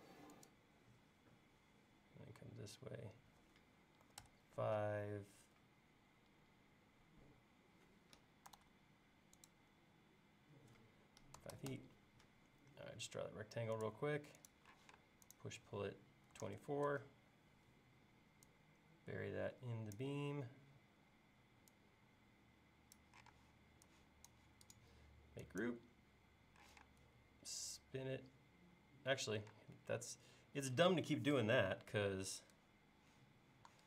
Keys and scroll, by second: 4.1 5, 4.2 Return, 8.6 super+z, 11.1-12.4 typing, 14.8 p, 16.1-16.9 typing, 23.3 space, 26.7 q, 29.5 space.